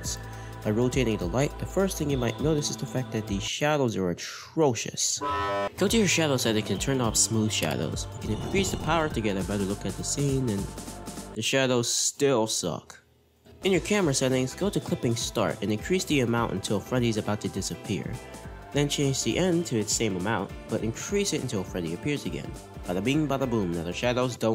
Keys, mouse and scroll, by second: 0.5 r, 8.1-9.8 drag, 10.1 r, 13.5 click, 13.5 scroll down 2, 15.8-18.6 drag, 18.7-23.2 drag, 24.1 drag.